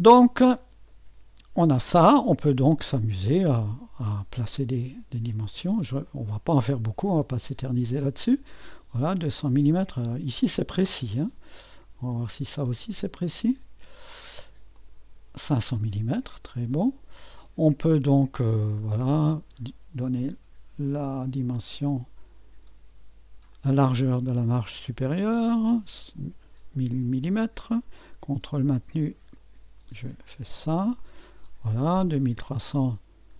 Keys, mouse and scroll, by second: 0.0-0.9 scroll up 2, 0.9-2.1 middle drag, 2.1-3.4 scroll up 2, 3.4-4.2 scroll down 1, 4.2 scroll down 1, 6.1 click, 7.8 click, 9.5 click, 12.8 click, 14.8 click, 16.2 click, 19.4 click, 23.0 ⌨, 23.6-24.7 drag, 25.2-26.2 drag, 27.6-28.8 drag, 28.8 ⌨, 29.4 click, 31.0 click, 32.9-33.3 drag.